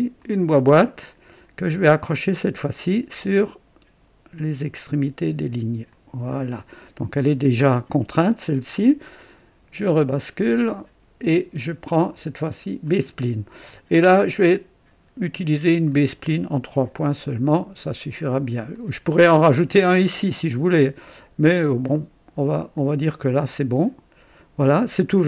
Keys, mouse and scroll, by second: 0.1 click, 2.5 click, 5.8 click, 6.8 right click, 10.1 click, 12.8 click, 15.8 click, 18.7 click, 22.7 click, 23.8 right click.